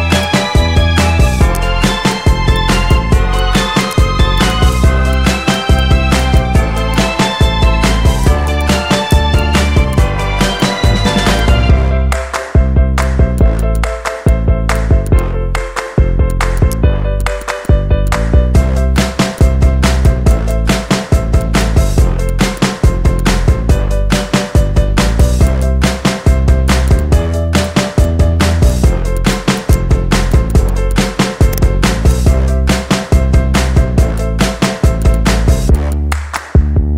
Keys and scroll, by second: 5.0 Delete, 11.7 4, 14.0 Up, 16.0 e, 23.8 z, 30.8 z.